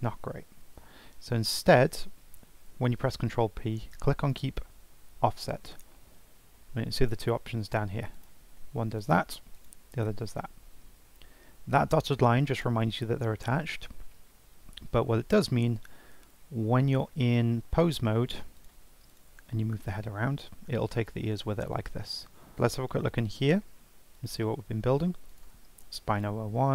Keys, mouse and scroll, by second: 0.3 ctrl+z, 0.7 ctrl+z, 2.9 ctrl+p, 7.0 click, 15.6 Tab, 16.8 Tab, 19.1 click, 19.9 r, 23.0 click, 24.1 click, 25.2 click, 26.1 click, 26.5-26.7 scroll down 3.